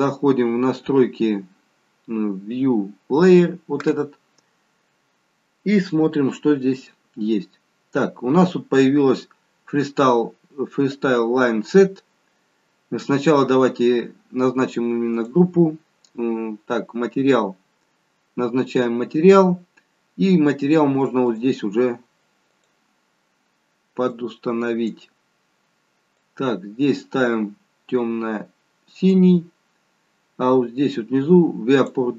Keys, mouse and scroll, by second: 3.2 click, 5.8-6.9 scroll down 3, 6.9-7.6 scroll down 1, 7.6-10.7 scroll down 3, 13.2 click, 15.1 click, 21.2 click, 22.4 click, 31.7 click.